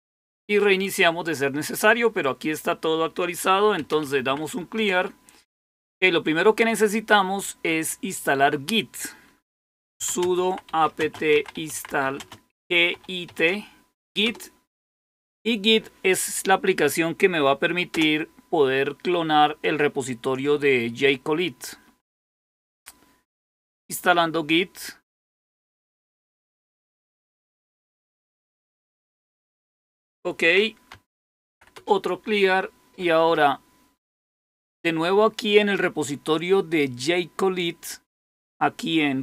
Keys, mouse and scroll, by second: 3.6-4.7 typing, 9.4-14.1 typing, 30.7-31.9 typing, 34.1 click.